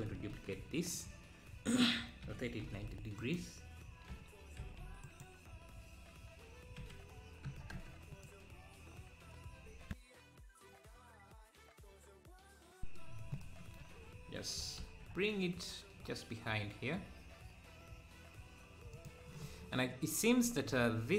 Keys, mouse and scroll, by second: 0.3 shift+d, 2.2 r, 4.1 r, 6.8 r, 14.6 g.